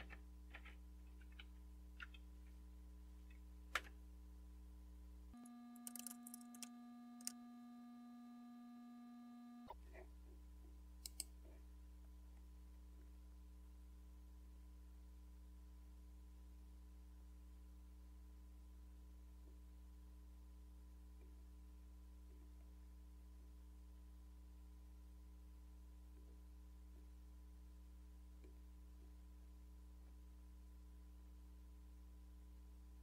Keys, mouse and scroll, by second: 0.0-1.9 typing, 3.5-4.2 typing, 11.1-12.2 drag, 12.3-14.0 scroll down 3, 14.6-16.2 scroll down 2, 17.3-18.2 scroll down 2, 18.3-19.5 scroll down 3, 19.5-20.0 scroll down 1, 21.2-22.2 scroll down 2, 22.3-23.4 scroll down 2, 23.4-24.0 scroll down 1, 26.2-30.1 scroll down 4, 30.1-32.2 scroll down 1, 32.9-33.0 scroll down 2.